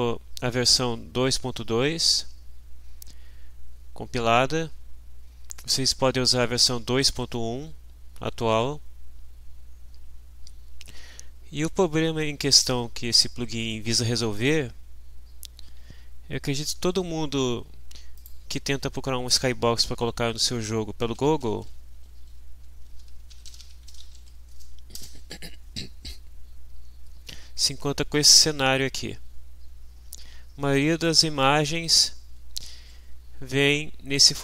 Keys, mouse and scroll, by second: 15.8 alt+Tab, 18.1 click, 20.8-24.7 typing, 22.2 Right, 24.9 Return, 28.1 click.